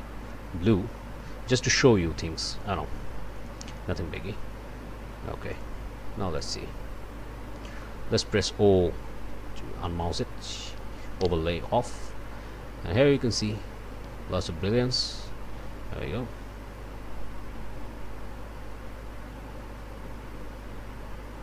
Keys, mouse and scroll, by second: 3.3 click, 5.5 click, 6.4 click, 7.8 click, 9.2 o.